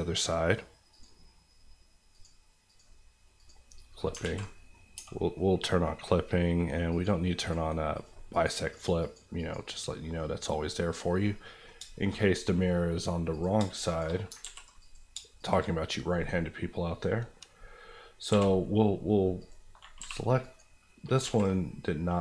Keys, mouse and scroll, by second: 1.9 click, 4.2 alt+z, 4.4 middle click, 4.8 scroll up 1, 4.9 Tab, 5.1 middle click, 6.9 click, 9.0 click, 10.0 middle click, 10.6 scroll up 1, 11.2 middle click, 11.7 shift+middle click, 12.1 middle click, 12.1-12.6 scroll up 2, 12.3 middle click, 13.3 click, 13.5 shift+click, 14.1 click, 14.3 ctrl+click, 14.4 ctrl+x, 14.8 click, 15.1 shift+click, 15.7 click, 16.2-16.6 scroll down 1, 16.6 middle click, 18.3 j, 19.4 click, 20.0 g, 20.4 right click, 20.8 middle click, 21.1 alt+middle click, 21.2 alt+z, 21.5 middle click.